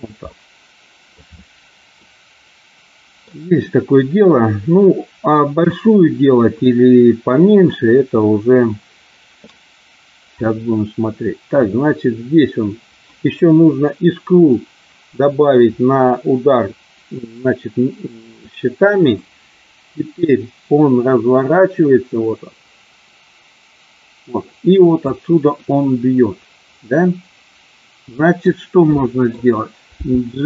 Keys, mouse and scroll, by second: 0.2 middle click, 1.9-3.2 middle drag, 5.6 KP_1, 6.6-7.7 middle drag, 8.2 middle click, 10.3-13.3 drag, 19.2-25.1 drag, 25.6-28.5 middle drag, 28.9 middle click, 29.8 g.